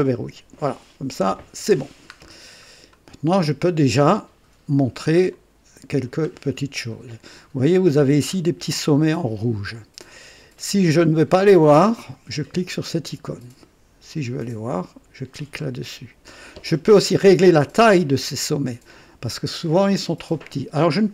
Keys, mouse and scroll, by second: 2.3-2.6 scroll up 1, 2.9 right click, 3.7 right click, 4.6 scroll up 1, 5.3-6.2 middle drag, 6.6 scroll up 1, 8.2-8.5 scroll up 1, 8.9 scroll up 1, 11.8 click, 14.1 click, 15.7-16.2 scroll down 1.